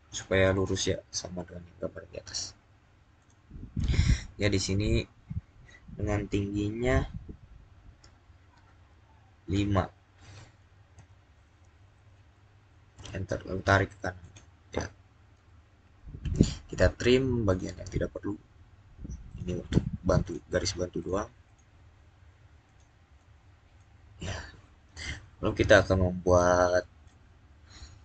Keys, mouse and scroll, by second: 0.4 click, 3.0 click, 10.8 click, 12.8 Return, 14.1 click, 17.3 click, 21.0-28.0 drag.